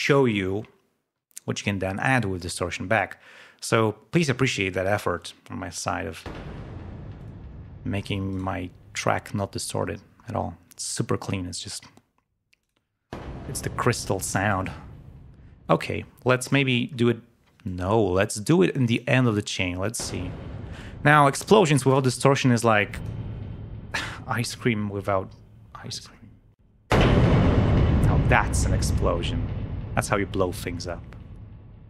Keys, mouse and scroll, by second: 6.2 l, 7.2 click, 8.3 right click, 9.8-10.4 scroll down 2, 12.6 click, 14.3 click, 15.7-16.7 drag, 17.7-19.2 drag, 20.7 right click, 21.1 click, 22.6 click.